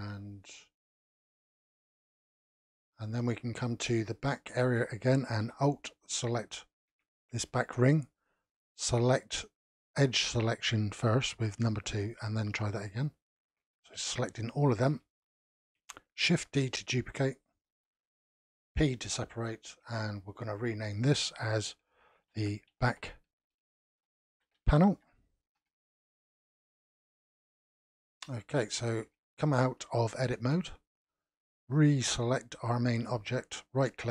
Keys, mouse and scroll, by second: 2.3-3.5 middle drag, 3.5 scroll down 2, 3.9-6.3 middle drag, 6.3 alt+click, 10.0 2, 12.9 alt+click, 14.0-14.4 scroll down 1, 14.4-16.4 shift+middle drag, 16.4 shift+d, 18.7 p, 20.5 click, 20.6-23.6 drag, 27.2-28.4 middle drag, 28.4-28.7 scroll down 1, 28.7 shift+middle click, 29.4-30.0 scroll up 2, 30.0 middle click, 30.7 Tab, 31.7 click, 32.1 click, 32.9-33.9 middle drag, 33.9-34.1 right drag.